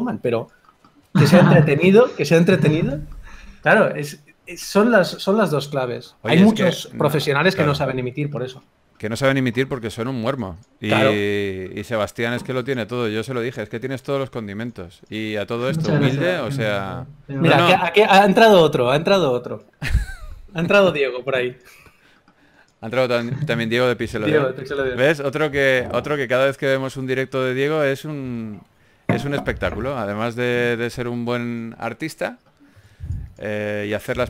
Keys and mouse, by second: 0.6-2.2 drag, 0.6 f, 2.6-6.7 drag, 10.9 f, 11.5 f, 11.7 click, 15.2 click, 16.0 f, 19.5-20.9 drag, 21.8-34.2 drag.